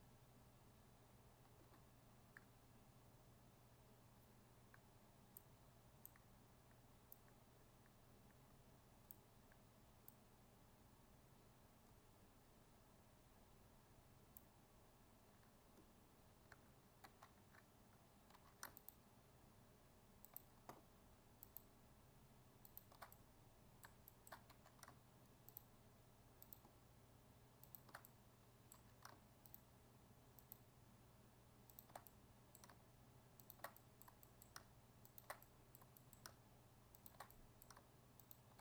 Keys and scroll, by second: 17.0 ctrl+z.